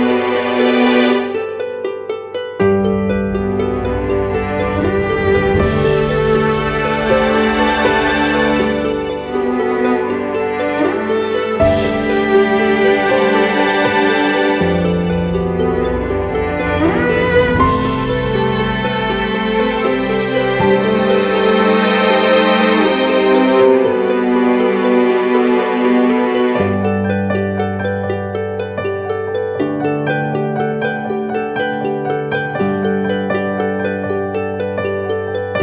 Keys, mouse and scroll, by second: 5.8 double click, 14.7 Down, 14.9 Down, 17.2 Down, 17.4 Left, 19.4 Right, 22.5 double click, 26.2 ctrl+-, 28.4-28.8 alt+scroll down 1, 32.7 alt+right click.